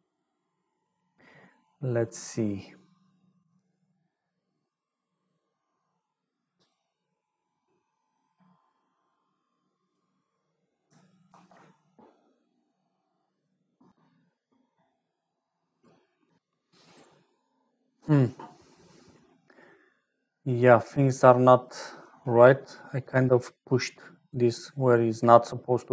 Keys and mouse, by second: 6.4 middle click, 8.2-9.9 drag, 11.2 ctrl+s, 18.9 click, 18.9 middle click, 18.9 right click, 20.2 click, 20.2 middle click, 20.2 right click, 21.4 click, 21.4 middle click, 21.4 right click, 23.5 click, 23.5 middle click, 23.5 right click, 24.2-25.2 drag.